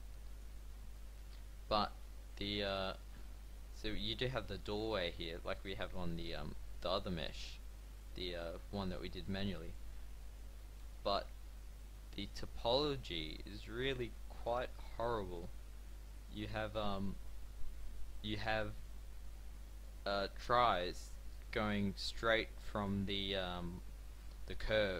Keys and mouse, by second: 2.0 x, 3.1 Tab, 10.5 Tab, 13.1 middle click.